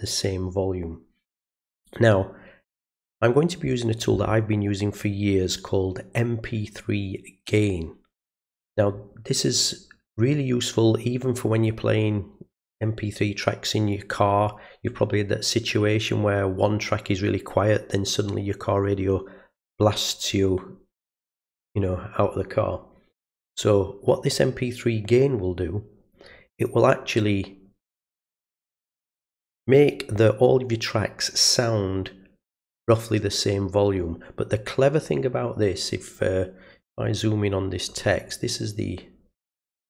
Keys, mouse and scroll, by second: 26.7 middle click, 28.2 click, 38.0-38.7 ctrl+scroll up 2.